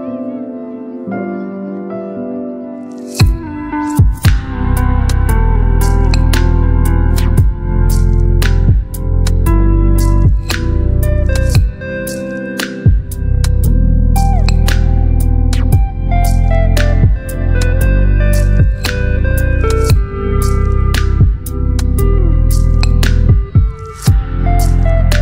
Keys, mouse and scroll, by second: 5.6 alt+scroll up 1, 9.2 ctrl+t, 11.3-13.8 drag.